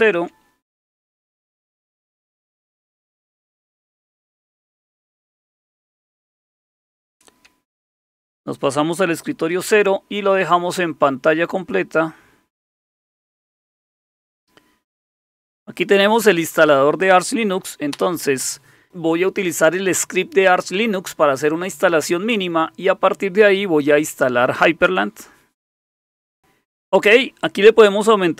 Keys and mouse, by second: 1.7 Down, 2.0 Down, 2.2 Down, 2.5 Up, 2.6 Up, 2.8 Up, 3.0 Up, 4.7 click, 6.4 super+Right, 8.1 shift+super+=, 11.6 click, 13.0 click, 17.9 Return.